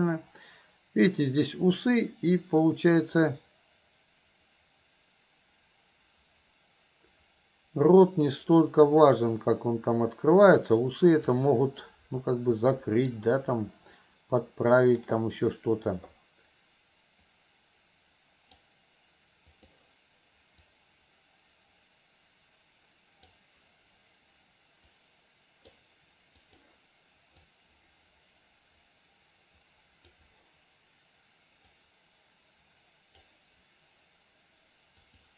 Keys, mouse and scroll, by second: 0.1-11.5 drag, 11.8-13.2 middle drag, 17.3-18.6 drag, 19.6-23.5 drag, 25.0 click, 26.5 click, 27.6-30.3 drag, 31.7-33.2 drag, 35.1 click.